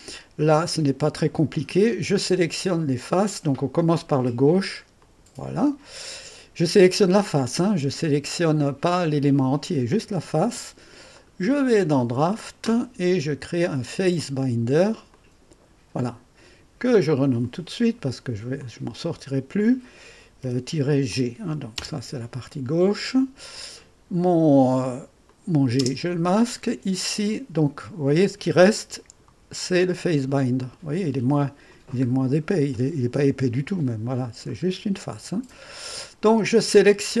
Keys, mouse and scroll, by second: 1.5-2.7 drag, 2.5-3.2 typing, 4.2 click, 5.0 click, 6.1 click, 8.0-9.9 drag, 8.7-9.4 typing, 10.9-12.5 typing, 11.1 click, 12.0 click, 15.1-16.2 drag, 17.4-19.1 drag, 18.0 F2, 20.4 -, 21.1 g, 21.8 Return, 23.5 click, 25.3 click, 25.3-28.1 typing, 25.8 click, 27.6-30.0 drag, 29.3-30.8 typing, 29.6-30.0 scroll up 1, 30.3-32.0 drag, 32.0-32.6 scroll up 1, 32.6 typing, 32.7-34.5 drag, 34.7 click, 34.7-35.4 scroll down 1, 35.8 click, 36.9-37.2 typing.